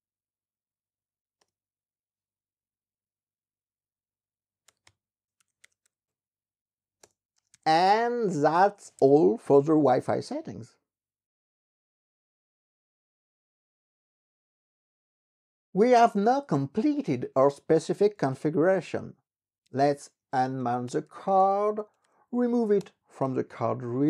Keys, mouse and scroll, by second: 17.7-22.6 typing, 22.8 Return.